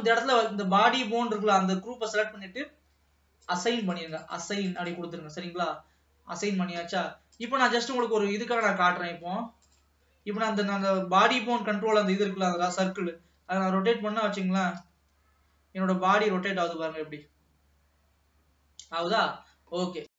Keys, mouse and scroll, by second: 3.6-5.4 drag, 5.4-5.8 scroll down 1, 5.8-7.3 middle drag, 7.3 ctrl+s, 7.6-8.9 drag, 9.9 click, 13.1 r.